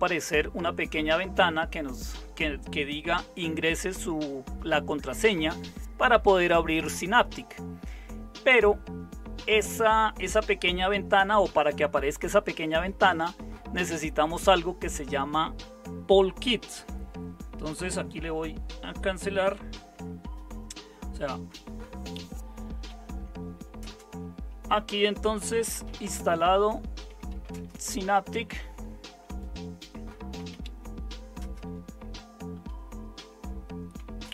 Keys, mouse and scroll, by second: 18.1 Escape, 19.9 super+5, 22.8-23.8 typing, 25.4-34.3 typing.